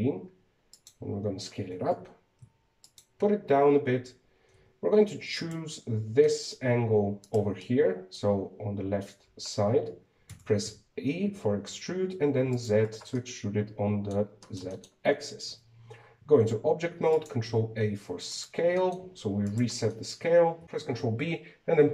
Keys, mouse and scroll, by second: 0.1 s, 2.5 g, 5.3 Tab, 6.1 right click, 7.0-8.0 middle drag, 8.0 shift+right click, 8.4-11.1 middle drag, 11.1 e, 13.9-16.3 middle drag, 16.3 Tab, 17.3 ctrl+a, 18.4 Tab, 19.1 right click, 19.5 middle click, 20.2 shift+right click.